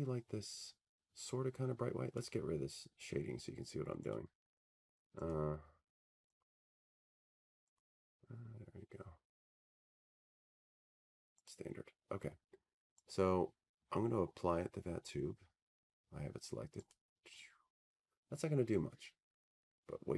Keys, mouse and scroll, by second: 2.1-5.3 drag, 7.6 click, 9.8 click, 10.9 click, 12.1 click, 13.4 click, 17.1 click.